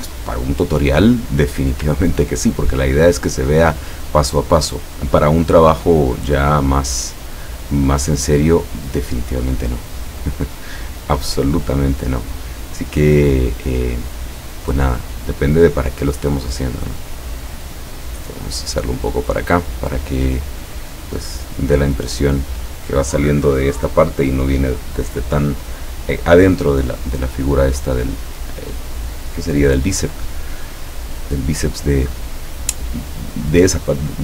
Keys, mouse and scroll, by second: 2.2-2.8 ctrl+scroll down 2, 3.3 ctrl+scroll up 1, 7.2 click, 9.1-14.8 drag, 16.3-19.4 drag, 33.4 click.